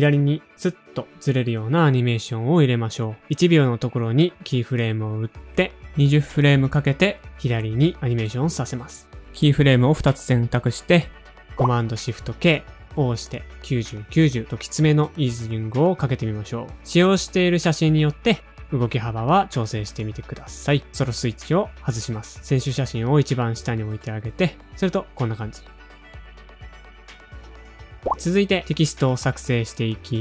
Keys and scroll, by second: 3.4 alt+shift+p, 4.8 shift+Page_Down, 5.0 shift+Page_Down, 8.0-9.0 typing, 12.8 shift+super+k, 14.8-15.6 typing, 17.9 space, 20.4 0, 21.6 space, 23.3 shift+super+[, 23.7 0, 25.4-25.8 typing, 27.6 space.